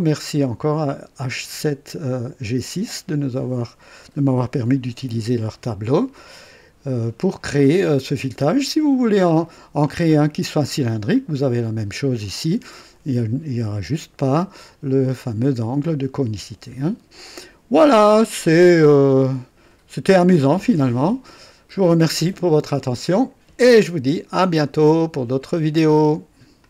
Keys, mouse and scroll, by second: 5.6 scroll down 1, 7.2 scroll down 2, 7.8-8.2 scroll up 2, 8.5 scroll up 2, 9.3 scroll down 2, 10.8-11.2 scroll down 2, 17.0-17.3 scroll down 2, 17.9 scroll down 1, 19.0 click, 25.2 right click, 26.5 click.